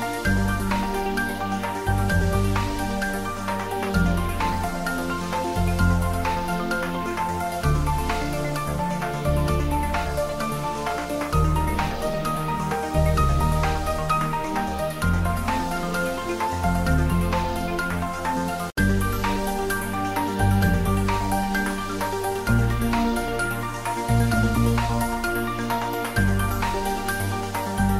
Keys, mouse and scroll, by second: 0.4 click, 2.2 shift+click, 3.9 Tab, 5.3 click, 10.3 click, 11.5 click, 13.2 middle click, 14.0 click, 17.0 ctrl+middle click, 17.4 click, 17.8 s, 19.0 click, 21.1-21.7 click, 22.1 ctrl+s, 22.6 click, 25.5 ctrl+s, 26.4 click, 27.1-27.5 ctrl+middle click, 27.7 ctrl+s.